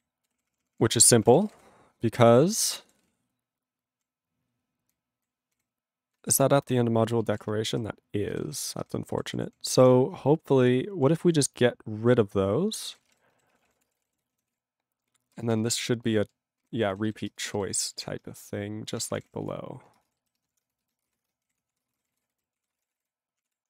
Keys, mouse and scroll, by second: 0.2 ctrl+w, 0.3 ctrl+p, 1.0 ctrl+space, 1.2 ctrl+p, 1.2 ctrl+e, 1.4 ctrl+b, 1.5 ctrl+w, 1.6 ctrl+p, 3.0 ctrl+s, 3.0 ctrl+p, 4.9 ctrl+n, 5.6 ctrl+/, 7.5 ctrl+/, 8.3 ctrl+g, 8.5 ctrl+/, 9.3 ctrl+s, 9.4 ctrl+p, 9.6 ctrl+n, 9.9 ctrl+p, 12.8 ctrl+a, 12.9 ctrl+space, 13.0 ctrl+e, 13.1 ctrl+g, 13.5 ctrl+s, 13.6 ctrl+p, 13.6 ctrl+a, 13.7 ctrl+space, 13.8 ctrl+e, 13.9 ctrl+n, 14.0 ctrl+e, 14.0 ctrl+g, 14.4 ctrl+s, 15.3 ctrl+space, 15.7 ctrl+alt+b, 16.6 ctrl+g, 16.9 ctrl+e, 17.0 ctrl+b, 17.2 ctrl+space, 17.7 ctrl+alt+b, 18.6-21.5 typing, 20.1 ctrl+space, 20.1 ctrl+b, 20.9 ctrl+b, 21.8 ctrl+e, 21.8 ctrl+space, 21.9 ctrl+a, 21.9 ctrl+p, 22.0 ctrl+g, 22.1 ctrl+e, 22.3 ctrl+n, 22.5 ctrl+p, 22.7 ctrl+space, 22.7 ctrl+e, 22.9 ctrl+n, 22.9 ctrl+e, 22.9 ctrl+g, 23.4 ctrl+p, 23.4 ctrl+e.